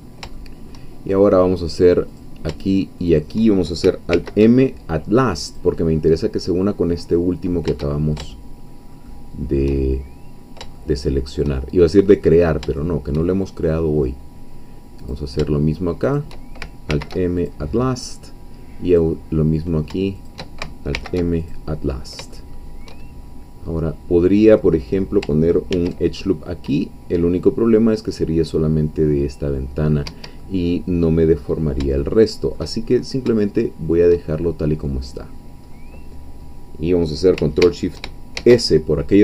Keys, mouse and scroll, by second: 0.4 shift+middle click, 2.2 click, 3.0 shift+click, 4.1 alt+m, 5.5-7.7 drag, 7.8-10.7 shift+middle drag, 12.3-13.6 middle drag, 13.7-15.0 middle drag, 15.0 click, 16.0 shift+click, 16.9 alt+m, 17.4 alt+click, 19.0 click, 20.1 shift+click, 20.9 alt+m, 21.4 alt+click, 22.0 scroll down 2, 22.3 shift+middle click, 23.2-23.5 shift+scroll up 2, 23.7-24.1 scroll down 2, 25.7 ctrl+r, 30.1 Escape, 30.4-32.7 middle drag, 32.9-33.2 shift+scroll up 2, 33.5 shift+middle click, 34.3 shift+scroll down 2, 34.9 middle click, 36.6 scroll down 2, 38.3 ctrl+shift+s.